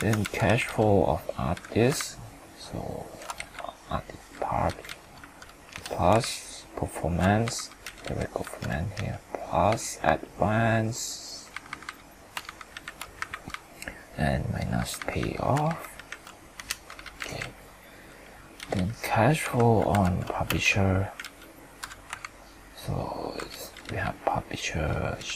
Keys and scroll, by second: 1.9 ctrl+Up, 12.4 ctrl+shift+Up, 12.7 ctrl+shift+Right, 15.7 ctrl+shift+Up, 15.9 ctrl+shift+Right, 22.2 ctrl+Up.